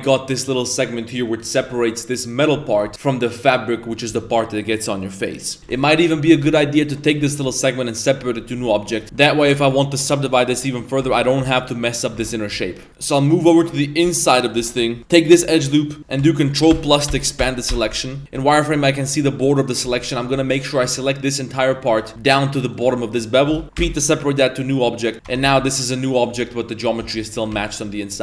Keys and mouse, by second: 0.5 right click, 9.2 middle click, 9.6 3, 9.7 right click, 10.3 ctrl+right click, 11.0 Tab, 11.2 right click, 11.4 g, 12.2 Tab, 12.5 1, 12.6 middle click, 12.9 Tab, 13.2-13.7 middle drag, 14.1-14.5 middle drag, 14.6 shift+middle drag, 15.0 Tab, 15.0 1, 15.1 alt+right click, 15.5-16.0 middle drag, 16.7 ctrl+KP_Add, 17.3 ctrl+KP_Add, 25.1 Tab, 25.1 a, 25.2 Tab, 25.4 Tab, 25.6 right click, 26.1 right click, 26.3 g, 27.0 z, 27.1 middle drag, 27.3 a, 27.5 a, 27.8 middle click.